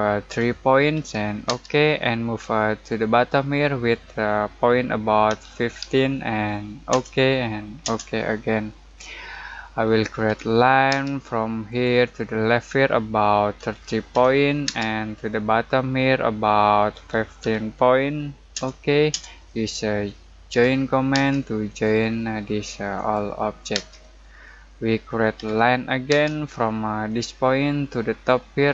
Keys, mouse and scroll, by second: 0.3 3, 1.4 space, 5.2-6.3 typing, 6.9 Return, 8.9-9.5 scroll down 1, 9.5 middle click, 10.2 l, 10.9 space, 11.6 click, 13.5-14.6 typing, 16.6-17.9 typing, 18.5 Return, 20.5 j, 21.1 space, 21.6 click, 23.7 space, 24.2 scroll down 1, 24.4 middle click, 25.3 l, 26.1 space, 27.0 click.